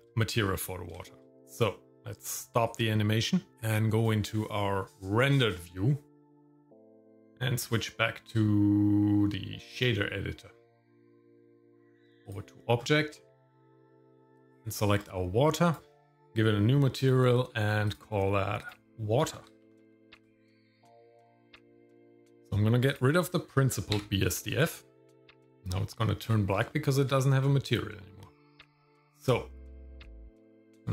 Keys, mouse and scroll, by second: 1.0 shift+middle click, 2.7 click, 3.3 shift+middle click, 4.4 click, 6.5 click, 6.7 shift+middle click, 6.8 scroll up 1, 7.1 click, 7.6 click, 9.6 click, 11.6 click, 12.8 scroll down 1, 13.2 shift+middle click, 13.8 scroll up 2, 14.1 click, 15.0-15.6 scroll down 2, 15.6 click, 18.0 click, 18.6-20.2 drag, 21.7-22.1 scroll down 1, 22.1 middle click, 22.9 click, 24.0 x, 25.7 shift+middle click, 26.7 shift+middle click.